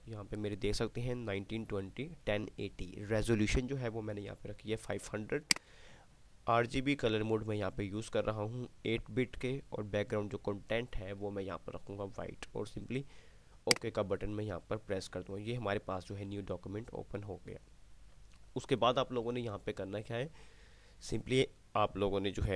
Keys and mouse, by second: 2.4 typing, 5.5-6.0 drag, 5.5 typing, 13.9 click, 16.5 typing.